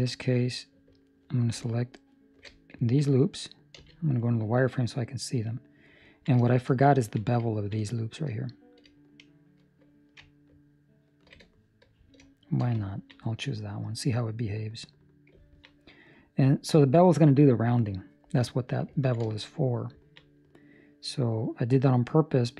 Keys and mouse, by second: 1.0 alt+right click, 2.1 alt+shift+right click, 2.7 ctrl+middle click, 3.7 z, 4.2 middle click, 6.0 ctrl+middle click, 6.4 shift+middle click, 6.9 ctrl+middle click, 7.5 ctrl+middle click, 7.7 shift+middle click, 8.1 shift+middle click, 11.3 alt+shift+right click, 12.8 ctrl+middle click, 13.4 middle click, 15.4 ctrl+middle click, 15.7 middle click, 18.9 ctrl+middle click, 19.2 shift+middle click, 19.5 middle click, 19.9 ctrl+middle click, 20.2 middle click.